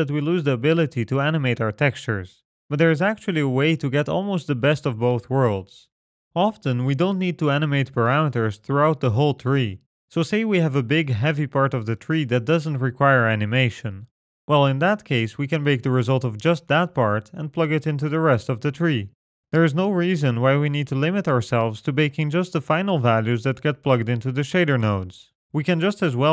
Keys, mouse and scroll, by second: 14.1-15.5 scroll up 13, 15.5 middle click, 16.1 scroll up 2, 18.7-20.9 scroll down 14.